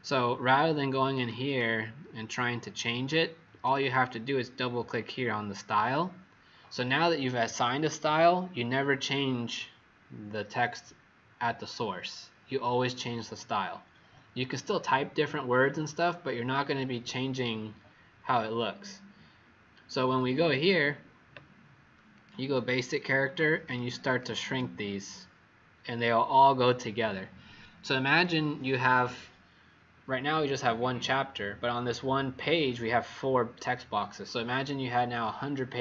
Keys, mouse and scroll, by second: 1.4 click, 3.4 Escape, 20.1 click, 20.5 click, 22.1 click, 24.0 click, 24.4 click, 26.0 click.